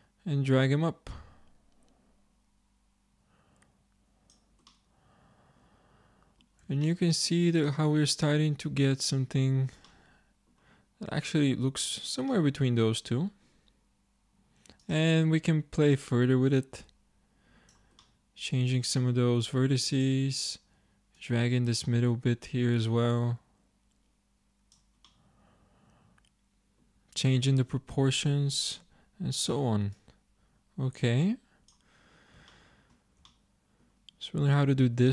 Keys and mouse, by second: 4.7-7.2 middle drag, 18.1-20.4 middle drag, 25.1 click, 25.3-27.5 middle drag, 28.8 Tab.